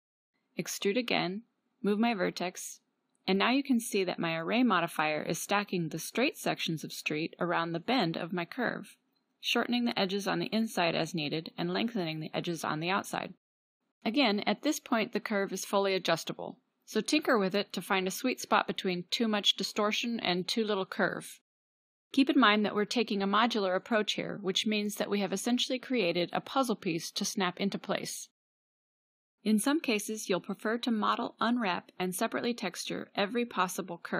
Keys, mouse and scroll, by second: 0.5 e, 2.5 e, 7.3 g, 7.7-8.7 drag, 8.7 middle click, 11.4 g, 14.0-22.2 drag, 14.0 g, 22.9 e, 28.7-30.4 drag, 30.4 g, 32.2 g.